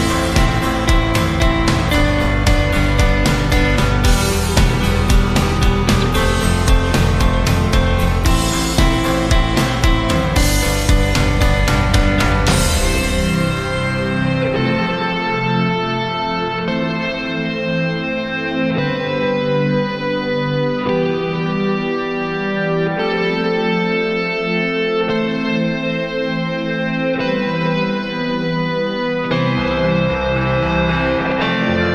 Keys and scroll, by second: 11.0 d.